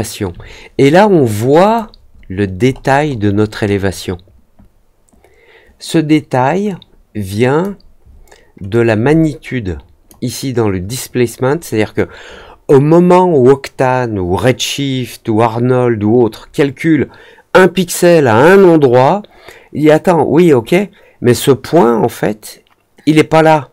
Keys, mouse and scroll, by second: 1.6 click, 2.1 middle click, 2.1-3.7 scroll up 5, 2.6 middle click, 2.9 middle click, 3.3 middle click, 3.6 middle click, 6.6-7.5 drag, 8.6-10.0 drag.